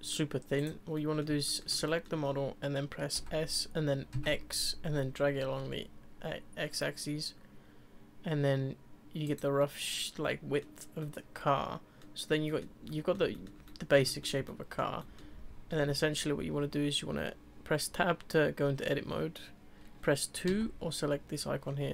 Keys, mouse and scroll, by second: 0.6 click, 0.9-3.2 middle drag, 3.2 s, 9.6-15.7 middle drag, 15.7 Tab, 20.5 2.